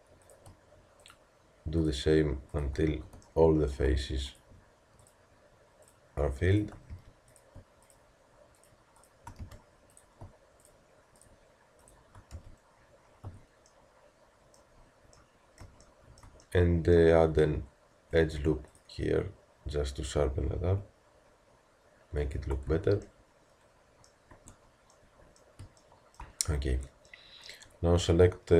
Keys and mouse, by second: 13.3 a, 14.5 click, 14.9 click, 18.1 ctrl+r, 22.7 Tab, 24.3 Tab, 26.7 Tab.